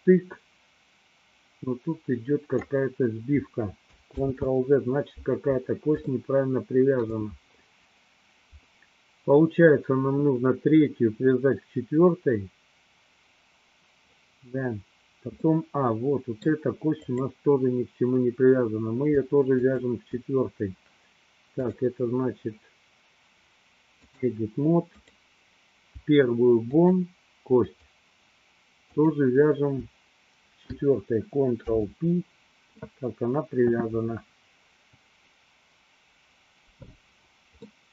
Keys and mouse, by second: 4.2 ctrl+z, 6.2-7.4 shift+middle drag, 15.6-16.7 middle drag, 17.2 click, 19.5 shift+click, 21.6-24.4 drag, 25.1 click, 26.7 shift+click, 27.9 shift+click, 29.0 shift+click, 31.5 ctrl+p.